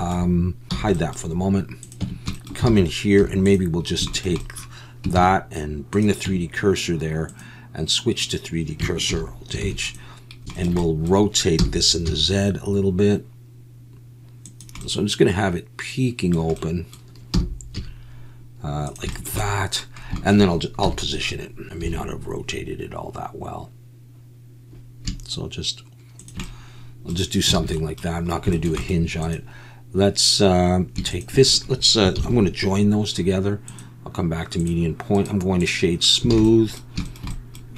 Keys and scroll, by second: 0.7 h, 2.0 Tab, 2.7 alt+a, 3.2 3, 5.2 shift+s, 6.2 Tab, 9.1 alt+h, 9.6 alt+a, 11.6 r, 12.0 z, 17.3 r, 17.7 z, 20.8 KP_7, 21.8 g, 27.6 alt+a, 32.1 ctrl+j, 36.3 alt+a.